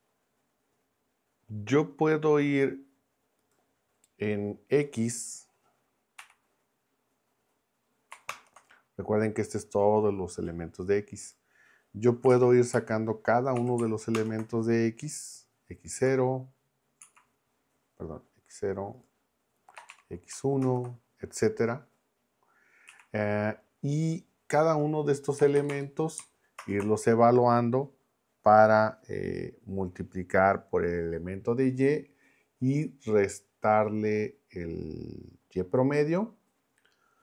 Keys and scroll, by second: 6.2 x, 8.3 ctrl+Return, 12.2 [, 12.3 ], 12.7 Left, 13.6 0, 14.1 ctrl+Return, 15.9 Left, 17.0 Right, 19.8 BackSpace, 19.9 1, 20.6 ctrl+Return, 22.9 Right, 25.4 BackSpace, 26.6 ctrl+Return.